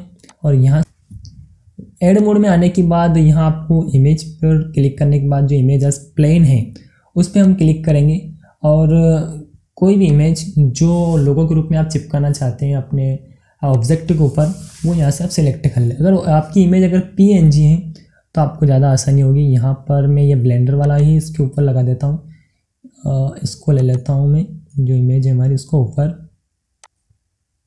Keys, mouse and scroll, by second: 7.3 click, 10.0 click, 13.6 click, 13.7 click, 20.8 click, 23.8 click, 26.3-27.6 drag.